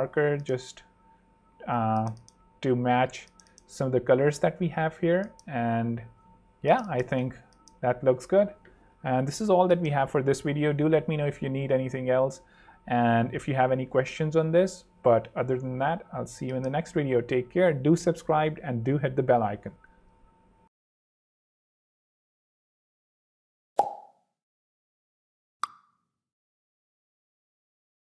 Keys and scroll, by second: 2.0 super+3, 6.6 super+2.